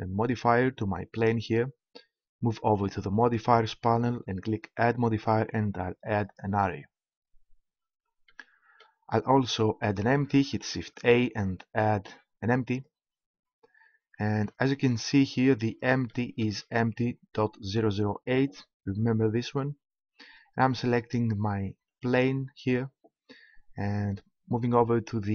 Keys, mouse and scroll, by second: 3.1-6.6 drag, 10.7 shift+a, 16.1 middle click, 21.9-23.8 right drag.